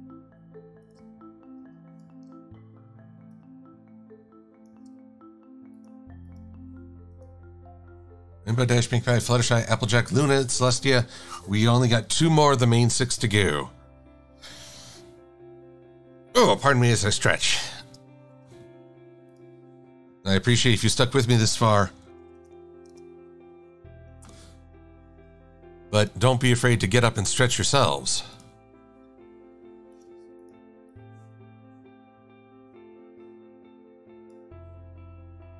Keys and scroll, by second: 21.8-22.8 typing, 23.0 Return.